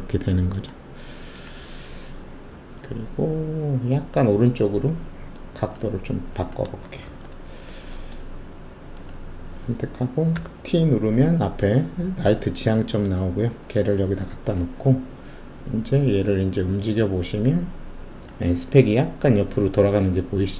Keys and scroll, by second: 7.0 shift+2, 10.3 t.